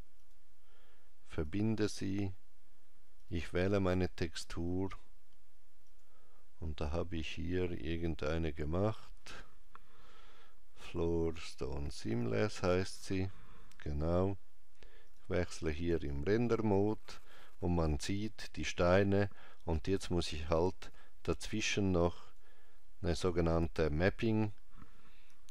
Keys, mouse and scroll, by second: 1.3 click, 3.0 click, 12.0 click, 14.9-16.0 click, 20.3 click.